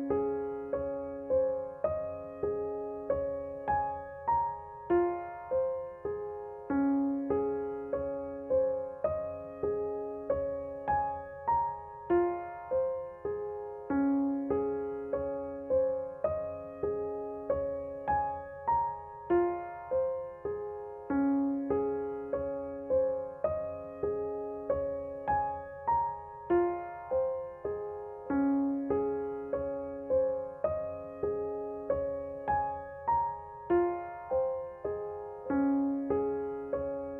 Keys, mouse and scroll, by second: 6.6 ctrl+z, 6.9-30.2 drag, 32.9 click, 36.8 right click.